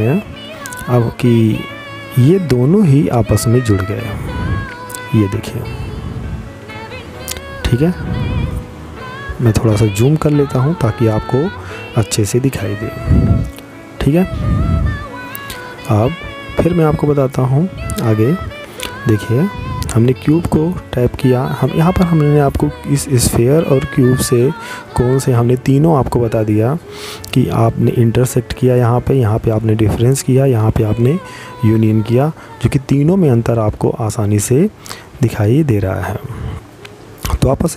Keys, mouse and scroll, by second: 0.0 click, 5.4 middle click, 6.5-6.9 scroll up 2, 6.9-8.1 scroll down 4, 8.1 middle click, 18.2 right click.